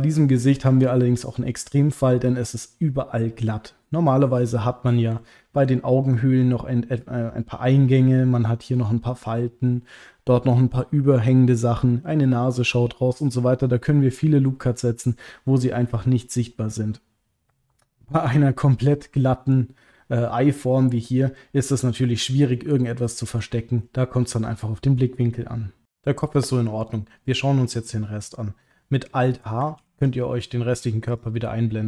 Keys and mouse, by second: 5.2 ctrl+middle click, 5.7 middle click, 16.0 middle click, 19.6-21.3 middle drag, 21.6-23.4 middle drag, 23.8-25.0 middle drag, 29.8 alt+h, 31.1 click.